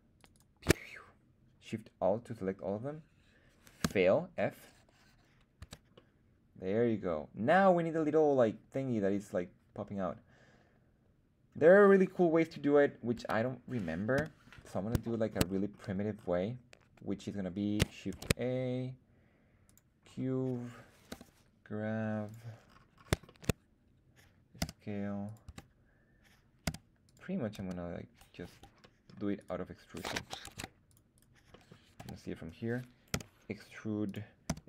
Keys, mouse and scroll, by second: 0.1 alt+shift+click, 0.1 alt+shift+right click, 0.2 alt+shift+click, 3.7 f, 5.0-5.5 scroll down 2, 5.5 Tab, 5.9-7.5 middle drag, 13.1 KP_1, 14.1 /, 15.0 shift+middle drag, 15.4-16.7 scroll down 3, 16.0-16.7 scroll up 1, 16.7-17.0 scroll up 1, 18.0 shift+a, 20.0-20.9 scroll down 1, 20.9 scroll down 1, 21.0 g, 22.2 click, 22.6-22.9 scroll up 3, 23.2 shift+middle drag, 24.5 s, 25.2 click, 25.4 Tab, 26.6 s, 27.0 click, 27.5 s, 28.3 Escape, 28.7 middle click, 29.0 scroll up 1, 29.3 right click, 30.4 ctrl+Tab, 31.1 right click, 31.4 middle click, 31.9 KP_1, 33.0 e, 34.0 click, 34.4 s.